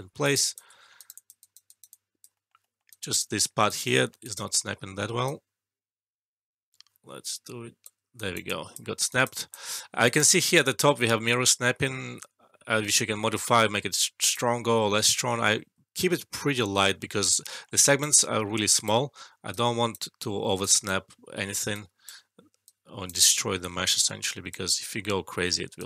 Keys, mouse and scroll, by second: 0.2 alt+right click, 0.3 alt+click, 0.7 alt+middle click, 0.9 alt+right click, 1.1 alt+click, 1.3 alt+right click, 1.8 alt+click, 2.3 alt+middle click, 2.8 alt+right click, 3.1 alt+middle click, 3.6 alt+right click, 3.9 alt+middle click, 4.1-8.0 alt+right drag, 8.1 alt+right click, 8.4 alt+click, 9.0 alt+right click, 9.3 alt+click, 9.7 alt+middle click, 10.0 alt+right click, 13.7 alt+right click, 14.0-15.1 alt+click, 14.5 alt+middle click, 16.1 alt+middle click, 16.9 alt+middle click, 17.8 alt+right click, 18.4 alt+middle click, 18.7 alt+right click, 19.5-20.1 right drag, 23.2 alt+middle click, 24.2-25.8 right drag.